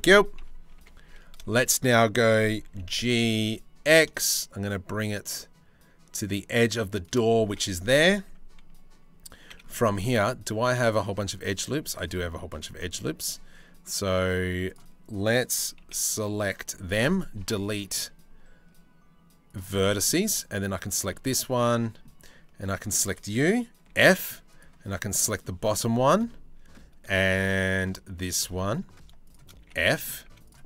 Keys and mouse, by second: 0.0 KP_3, 0.4 KP_1, 0.6 a, 1.4 shift+middle click, 2.3 g, 7.0 1, 9.1 c, 15.4 c, 17.0 Delete, 19.3 middle click, 19.9 2, 20.3 middle click, 20.7 middle click, 21.4 shift+middle click, 23.5 f, 24.1 middle click, 27.1 click, 28.1 click, 29.2-30.6 typing, 29.4 click, 30.5 click.